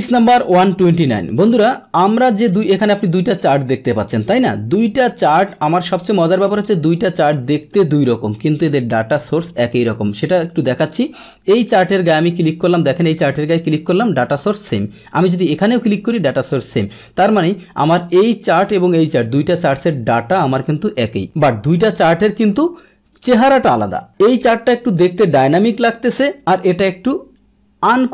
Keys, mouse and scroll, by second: 2.9-6.9 drag, 10.1 click, 11.5 click, 12.2 click, 12.7 click, 13.3 click, 15.0 click, 15.8 click, 16.8-18.0 drag, 24.4 click, 25.4 Delete.